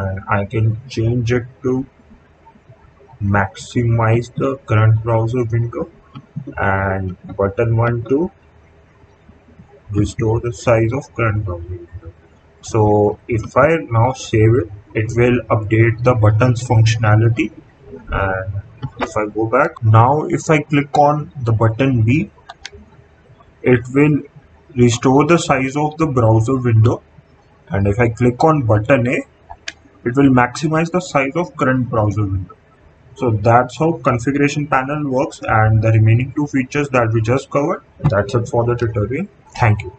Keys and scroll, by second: 22.4 b, 29.4 a.